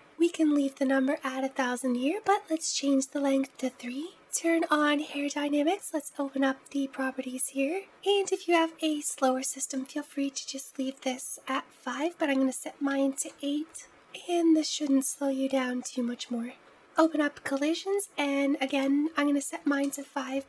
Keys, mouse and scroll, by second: 4.8 click, 5.6-6.8 drag, 6.8-7.8 scroll down 6, 11.7-13.9 drag, 16.5-16.8 scroll down 4, 16.8-17.3 drag, 17.3-18.5 scroll down 2, 18.5-20.3 drag.